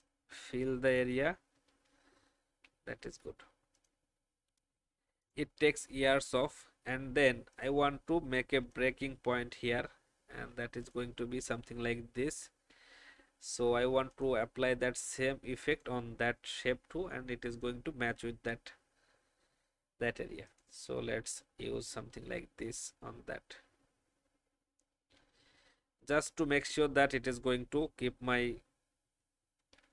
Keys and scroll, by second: 2.6 Down, 2.8 Down, 3.0 Down, 27.7 Down, 27.9 Down, 29.5 2.